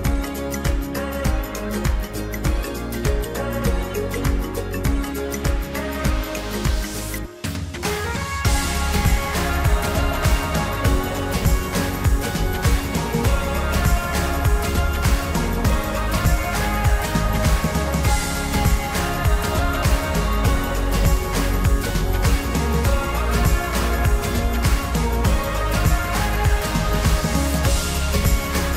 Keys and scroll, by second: 26.8 ctrl+t.